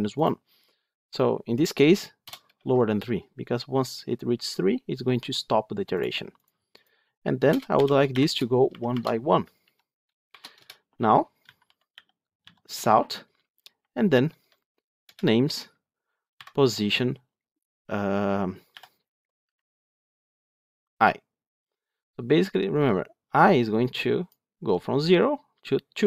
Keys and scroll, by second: 12.6 Tab, 14.9 Return, 19.4 Escape.